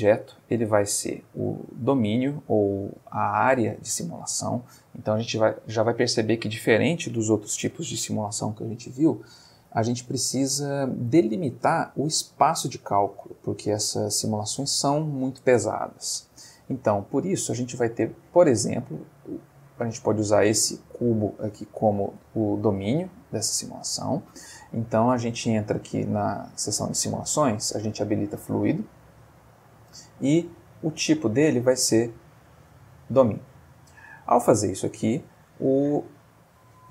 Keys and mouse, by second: 0.8-1.4 middle drag, 1.6 ctrl+click, 17.4-18.6 drag, 19.5 click, 20.2 ctrl+click, 21.4-22.0 middle drag, 22.4-22.9 ctrl+middle drag, 23.4-24.2 middle drag, 26.0 click, 28.6 click, 30.5 click, 32.6 click, 34.5-35.4 middle drag, 35.4-36.9 ctrl+middle drag.